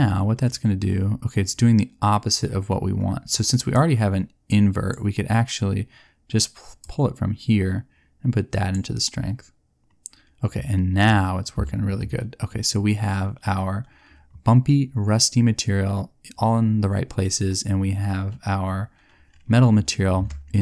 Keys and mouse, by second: 4.2 click.